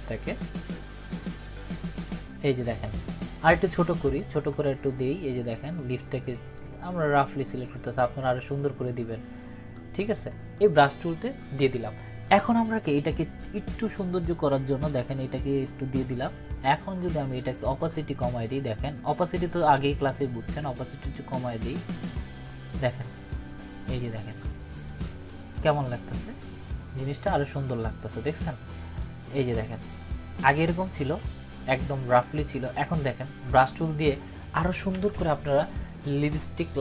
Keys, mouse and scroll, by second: 3.8 [, 4.1 [, 4.2 [, 4.4 [, 4.8-5.7 drag, 14.3-15.2 drag, 20.7-22.3 drag, 28.4-29.0 drag.